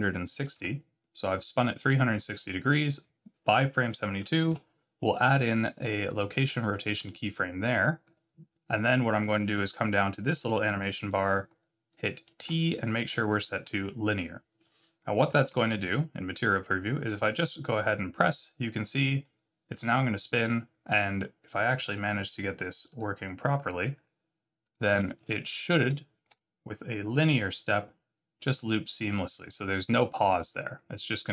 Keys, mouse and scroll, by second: 4.5 i, 7.3 click, 9.2 click, 12.4 t, 15.4 z, 17.2 click, 22.8 click, 23.5 click, 24.6 click, 25.6 shift+click, 26.3 t.